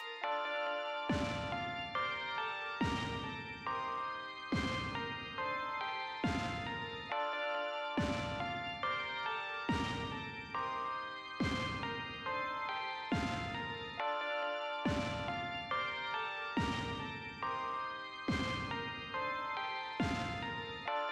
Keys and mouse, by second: 2.2 click, 6.4 click, 10.3 click, 13.5 click, 19.7 click.